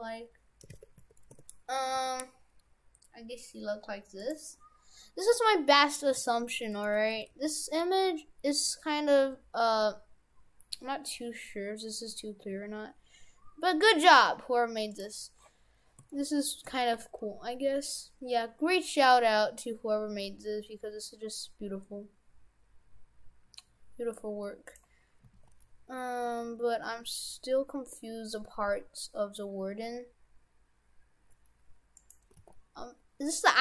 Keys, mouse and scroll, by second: 2.0 g, 5.3 middle click, 6.1 s, 7.2 s, 10.2 s, 15.3-16.1 scroll up 3, 16.1 shift+middle click, 16.9 g, 25.3 s, 32.3 g.